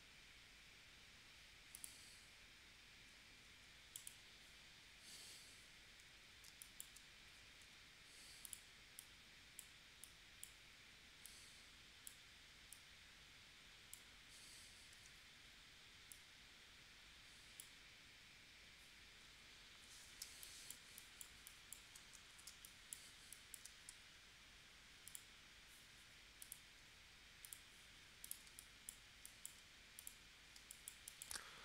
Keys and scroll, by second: 6.4 space, 7.6 a, 14.9 shift+w, 20.2 space, 22.4 space, 23.9 v, 28.5 space, 30.5 space.